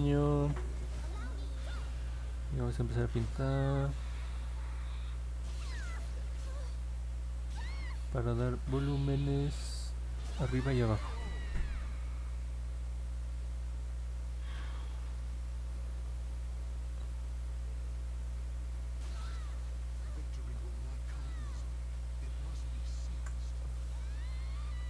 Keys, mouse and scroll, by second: 1.3-20.6 drag, 21.4 click, 23.0 ctrl+z.